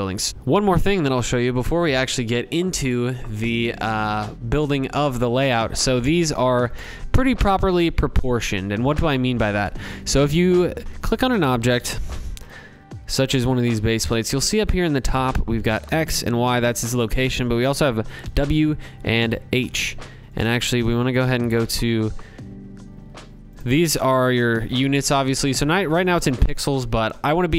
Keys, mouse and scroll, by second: 5.7-8.7 drag, 10.4 click, 11.4 click.